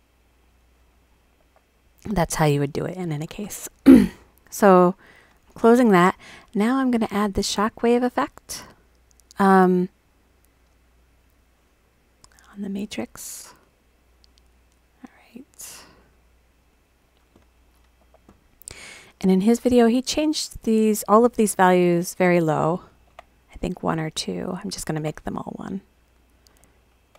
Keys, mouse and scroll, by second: 0.4 click, 4.8 click, 9.5 click, 11.4-12.8 drag, 13.9-15.9 drag, 16.7-17.1 drag, 20.0 click, 20.1 click, 20.2 click, 22.2 click, 22.3 click, 24.2 click, 24.3 click, 26.2 click, 26.3 click.